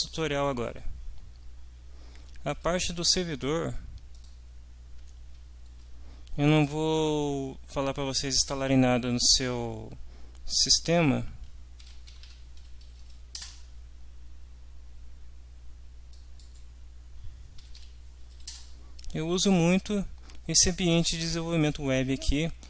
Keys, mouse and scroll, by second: 4.1 click, 11.5-12.7 typing, 12.8 Down, 13.6 Return, 16.1 click, 17.3-18.3 typing, 18.5 Return.